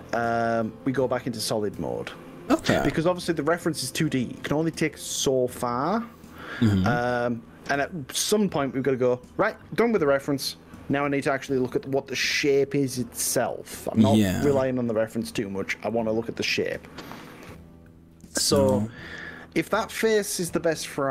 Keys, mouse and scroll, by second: 15.0 click, 16.0 click.